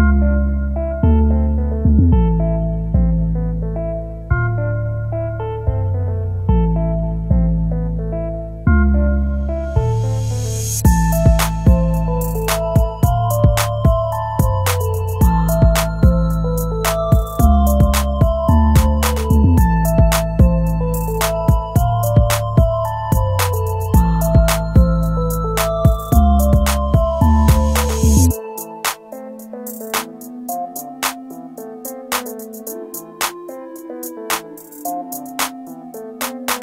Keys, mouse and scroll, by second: 2.9-3.4 scroll down 1, 3.4 scroll up 1, 6.3 F11, 23.9 ctrl+z, 28.6 shift+click, 30.9 right click.